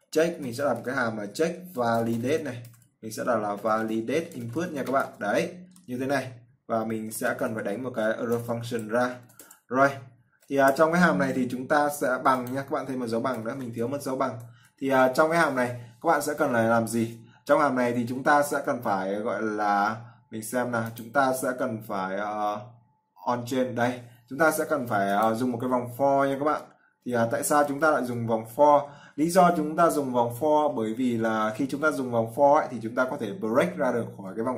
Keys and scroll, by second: 15.0 ctrl+s.